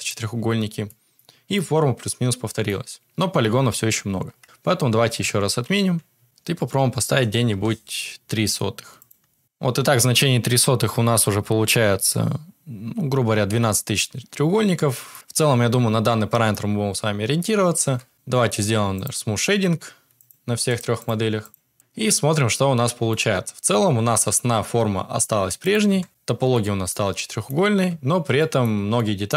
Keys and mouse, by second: 0.3 Tab, 0.8 middle drag, 1.5-2.6 middle drag, 4.4 ctrl+z, 5.2 ctrl+z, 5.9 ctrl+z, 6.2-7.5 drag, 9.4 Tab, 10.9 Tab, 11.3 Tab, 15.1 middle click, 16.0 middle click, 17.8 Tab, 18.1 click, 20.1 click, 20.6 click, 21.7-22.8 middle drag, 25.3 click, 25.6 Tab, 26.5 middle click, 27.8 Tab, 28.3 middle click, 28.9 middle click.